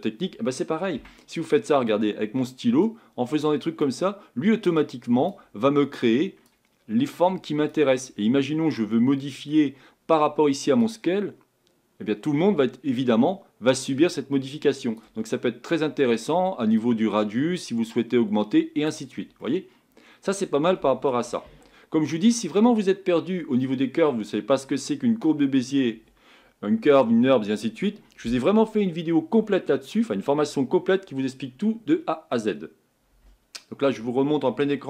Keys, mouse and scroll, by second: 1.0 Tab, 2.8-13.8 drag, 17.4-19.4 drag, 19.4-21.5 middle drag, 21.5 Tab, 21.8-22.5 scroll down 2, 22.5-23.2 scroll up 3, 23.2-27.2 scroll up 1.